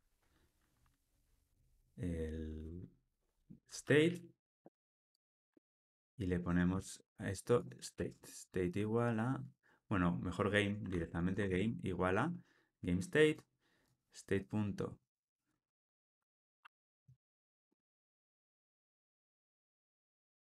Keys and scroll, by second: 5.5 super+c, 6.6 super+v.